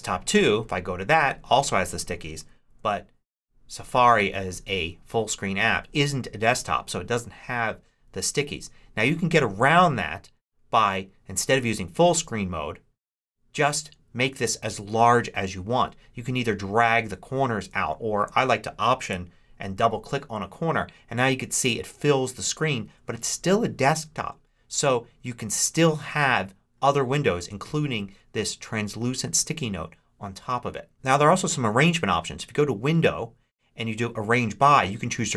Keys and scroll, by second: 2.6 ctrl+Up.